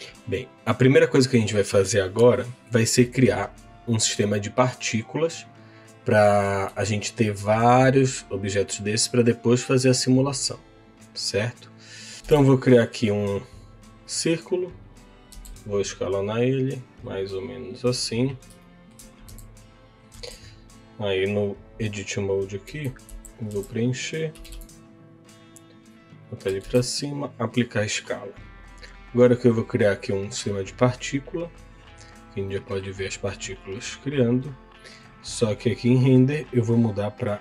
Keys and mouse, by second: 1.1-4.1 middle drag, 6.8 shift+middle click, 12.1 shift+Delete, 12.4 shift+a, 15.3 s, 17.5 click, 18.6 shift+middle click, 19.2 s, 20.2 Tab, 22.6 a, 23.0 f, 24.0 Tab, 24.3 g, 25.6 z, 26.6 ctrl+a, 32.4 middle click, 36.3-37.4 drag.